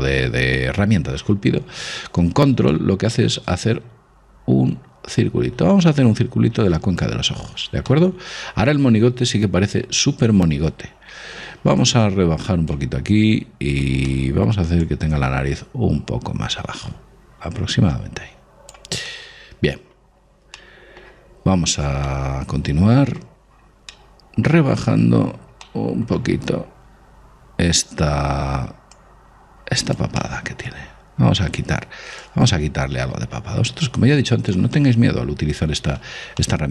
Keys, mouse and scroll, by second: 3.0 click, 7.6 middle click, 8.1-10.1 middle drag, 12.1 click, 14.3-16.0 middle drag, 15.1 click, 19.3-27.7 middle drag, 29.2 click, 30.5-32.2 middle drag, 32.5 click, 35.0-36.7 middle drag.